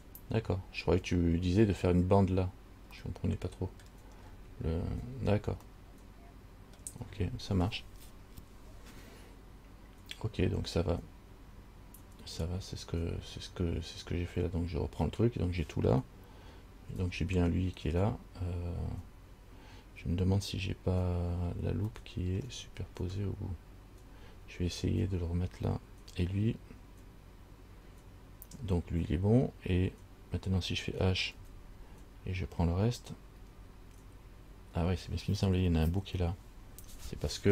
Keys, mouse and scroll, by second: 3.3 middle click, 4.4-4.8 scroll down 3, 5.1 scroll down 4, 6.0 middle click, 17.1 a, 17.2 a, 22.2 shift+middle click, 23.3 scroll up 3, 24.2 scroll down 2, 31.6 h, 33.6 l.